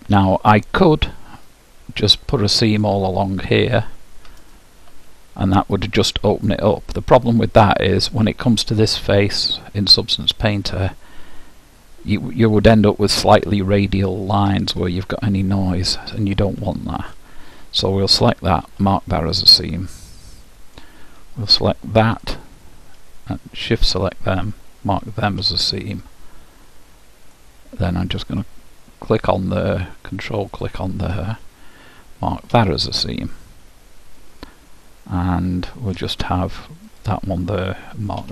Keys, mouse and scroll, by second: 2.8-6.3 drag, 16.9-18.7 drag, 19.4 middle click, 22.3-25.9 drag, 27.4-29.2 middle drag, 29.2-32.3 drag, 33.3-35.2 middle drag, 36.9-38.3 drag.